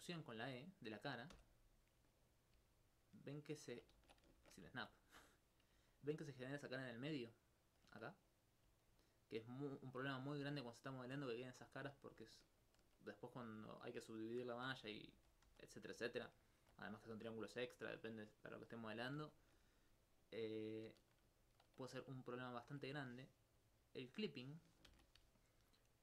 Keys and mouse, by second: 2.3 click, 2.8 alt+click, 3.8 alt+click, 4.0 ctrl+z, 4.4 shift+Tab, 4.8 alt+click, 5.2 alt+click, 5.7-7.8 drag, 8.3 right click, 8.8 alt+click, 8.9 alt+click, 9.7 ctrl+alt+click, 12.0 alt+click, 12.2 alt+click, 13.3 alt+click, 13.9 alt+click, 14.9 alt+click, 15.1 ctrl+z, 15.5 ctrl+z, 16.3 alt+click, 17.0 alt+click, 19.4 shift+space, 20.5 middle click, 24.1 click, 24.9 shift+space, 25.4 alt+click.